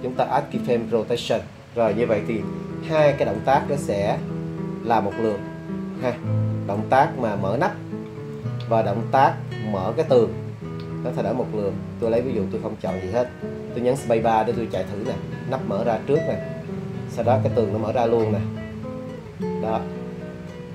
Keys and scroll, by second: 14.6 space.